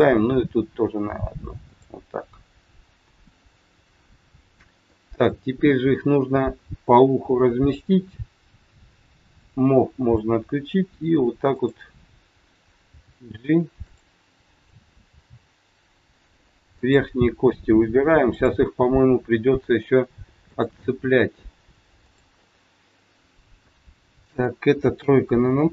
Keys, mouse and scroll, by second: 0.3 e, 2.3 middle click, 9.4 click, 11.4 click, 12.9 g, 14.5 click, 15.0 g, 16.8 click, 17.5 g, 18.5 middle click, 18.5 scroll up 1, 20.4 click, 20.9 g, 22.4 middle click, 23.9 middle click, 25.0 KP_3.